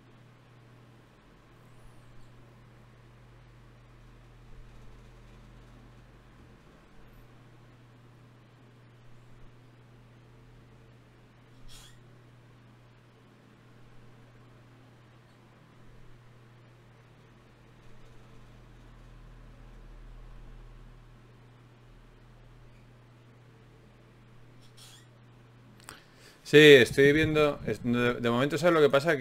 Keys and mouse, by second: 2.8 ctrl+r, 6.2-9.4 drag, 9.4 ctrl+Tab, 10.3 click, 11.1 right click, 11.5 right click, 15.7 ctrl+Tab, 20.1 right click, 22.1 f, 22.9 ctrl+Tab, 24.5 f, 24.7 f, 27.3 ctrl+Tab.